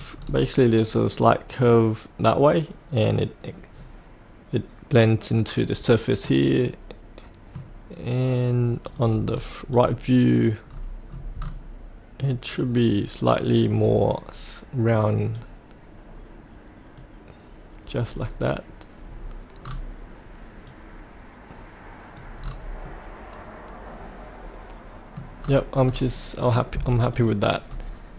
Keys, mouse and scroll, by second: 0.1-6.2 scroll down 1, 6.2-7.9 middle drag, 8.9 click, 9.2-9.7 scroll down 1, 9.7 click, 10.6-11.2 scroll down 1, 12.5-17.0 drag, 18.1-19.1 scroll up 1, 19.6-20.6 scroll down 1, 20.6-22.4 drag, 22.4-22.8 scroll up 1, 22.8-25.1 middle drag, 25.3-25.9 scroll down 1, 27.1 click, 27.6-28.1 scroll up 1.